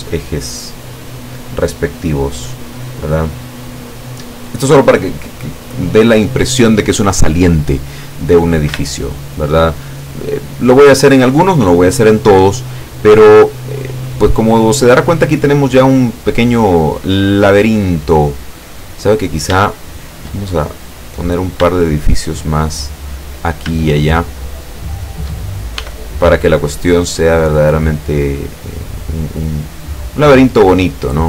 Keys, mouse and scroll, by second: 0.8-3.0 middle drag, 3.6 middle click, 4.6 scroll up 2, 5.0 scroll down 2, 8.9 shift+middle click, 9.7 shift+scroll down 2, 10.4-11.6 middle drag, 12.9 scroll down 2, 13.4-17.2 middle drag, 17.3 scroll down 2, 17.6-19.1 middle drag, 19.2-19.6 scroll up 3, 19.7 shift+click, 20.8 click, 21.3 scroll up 2, 21.8 shift+middle click, 23.2 right click, 23.9 shift+right click, 24.5 shift+right click, 25.0 shift+right click, 25.8 e, 27.6 click, 28.1-31.2 middle drag.